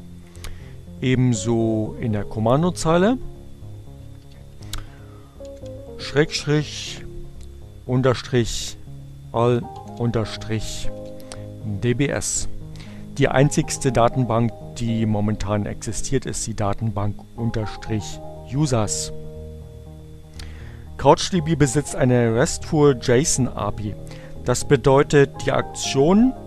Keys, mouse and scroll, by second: 0.7 click, 1.2 Up, 3.7 shift+7, 5.3-7.0 typing, 8.8 shift+-, 9.0 b, 10.2 s, 11.1 Return.